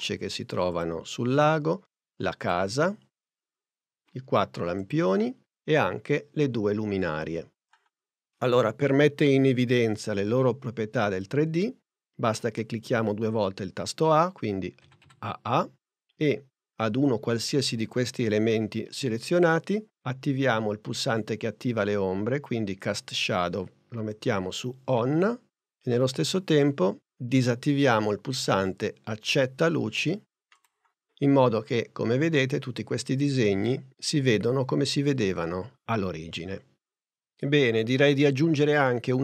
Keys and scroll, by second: 14.9 a.